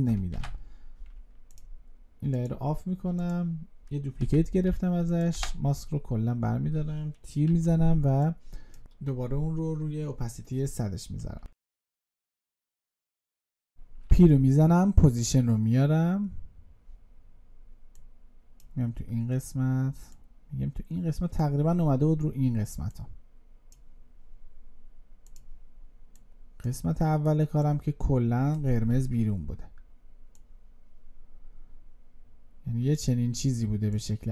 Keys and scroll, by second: 0.2 ctrl+d.